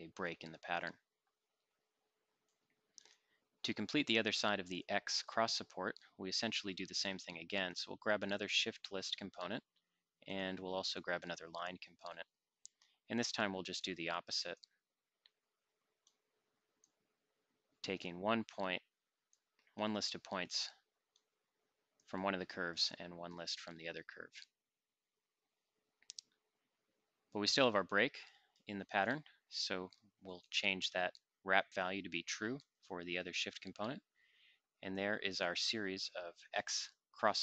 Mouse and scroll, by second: 32.5 click, 35.1 middle click, 35.3-37.4 drag.